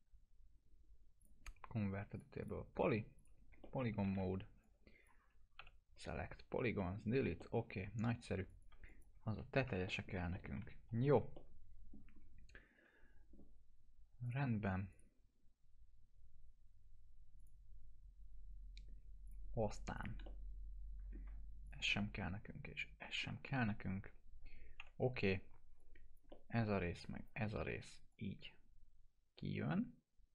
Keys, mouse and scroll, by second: 1.2 click, 3.6-4.2 alt+middle click, 4.2 F3, 4.6-5.2 click, 5.5 Delete, 6.7 middle click, 7.0 scroll down 1, 7.3 middle click, 7.5 scroll down 1, 8.4 click, 9.6 Delete, 9.8 middle click, 10.6 scroll up 1, 10.8 F3, 11.3-11.9 alt+middle click, 12.1 scroll up 1, 14.2 click, 17.3 click, 20.2-21.1 alt+middle drag, 21.6 ctrl+click, 21.9-23.2 alt+middle drag, 24.7 Delete, 25.4 1, 25.7-26.6 click, 26.3 alt+middle click, 26.9-27.5 ctrl+click, 27.4 e, 28.1-30.3 drag.